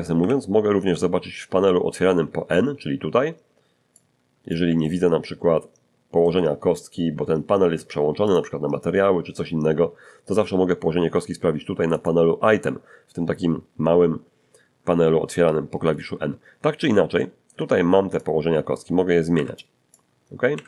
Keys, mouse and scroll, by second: 0.2 n, 3.9 click, 4.8-6.4 ctrl+middle drag, 8.3 click, 11.9 click, 17.1 shift+middle click, 18.2-19.7 shift+drag, 19.3 Escape, 19.9 click, 20.5 Escape.